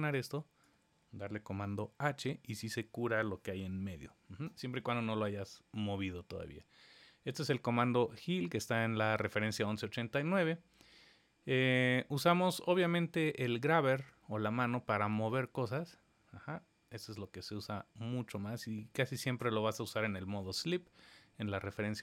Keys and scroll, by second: 1.5 super+h.